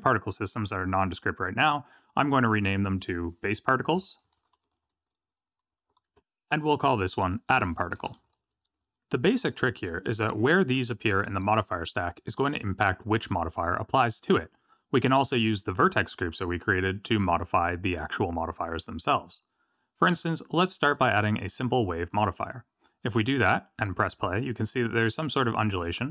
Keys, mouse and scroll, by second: 2.4 click, 20.8 click.